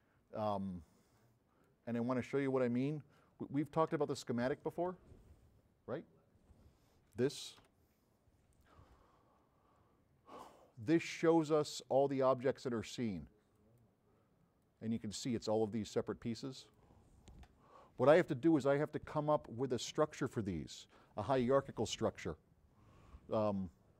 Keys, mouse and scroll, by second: 7.8 9, 10.4 click, 12.2 click, 13.6 drag, 15.1 click.